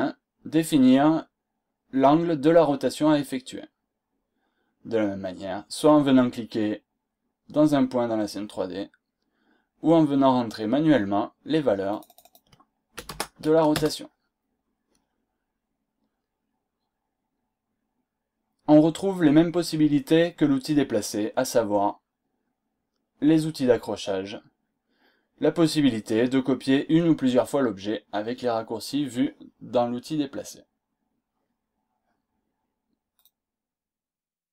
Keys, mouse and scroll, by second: 11.9 click, 12.7-13.6 typing, 14.1 Return, 33.2 click.